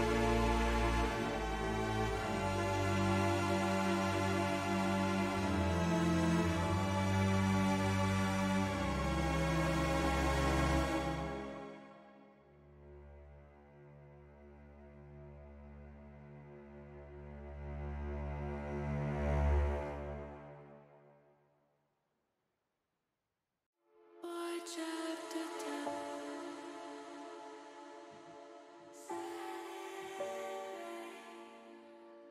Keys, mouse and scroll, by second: 0.2 middle click, 1.2 ctrl+b, 3.1 click, 3.8 middle click, 5.3 middle click, 5.4 middle click, 6.3 middle click, 8.1 middle click, 8.2 middle click, 8.6 middle click, 13.1 middle click, 14.1 ctrl+z, 14.6 ctrl+z, 15.3 middle click, 16.2 middle click, 17.0 click, 18.4 ctrl+b, 19.6 ctrl+click, 20.1 ctrl+z, 22.3 middle click, 22.7 middle click, 24.3 KP_1, 25.8 ctrl+r, 26.8 click, 27.7 middle click, 28.6 middle click, 30.4 s, 31.3 click, 31.6 ctrl+z.